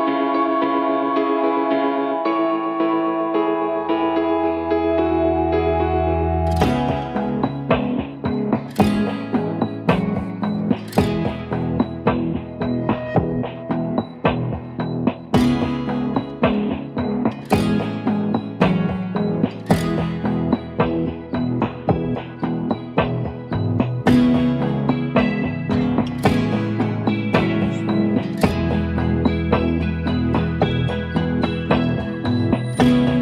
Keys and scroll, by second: 1.3-7.1 typing, 8.2 Right, 8.3 Right, 8.4 Right, 8.6 Right, 9.1 ctrl+j, 13.1 4, 15.4-23.8 typing, 29.6 ctrl+d.